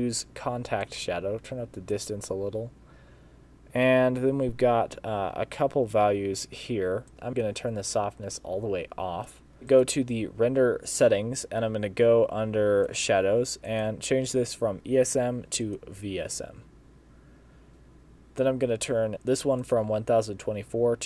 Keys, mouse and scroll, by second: 0.9 click, 9.7 click, 12.9 click, 13.7 click, 19.1 click, 19.6 click.